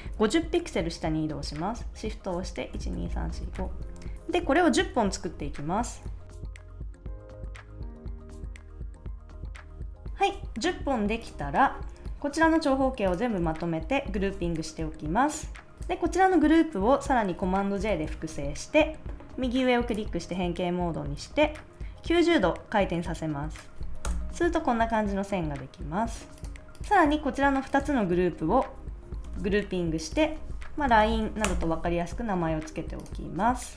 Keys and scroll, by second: 2.7 shift+Down, 6.2 super+j, 6.4 shift+Down, 6.6 shift+Down, 6.9 shift+Down, 7.1 super+j, 7.3 shift+Down, 7.6 shift+Down, 7.8 super+j, 7.8 shift+Down, 8.0 super+j, 8.2 shift+Down, 9.4 super+j, 9.5 shift+Down, 14.1 super+g, 17.7 super+j, 24.0 Return, 29.2 super+g, 30.4-31.5 typing.